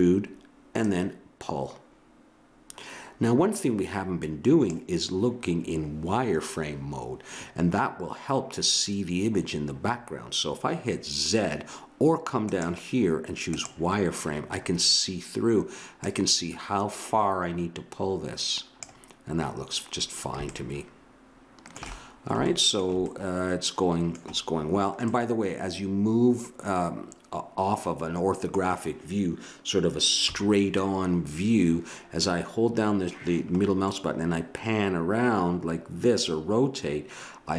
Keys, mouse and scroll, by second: 12.5-14.7 drag, 16.0-17.1 drag, 20.5-21.7 middle drag, 25.1-26.9 middle drag, 30.2 KP_3, 33.8-35.7 middle drag.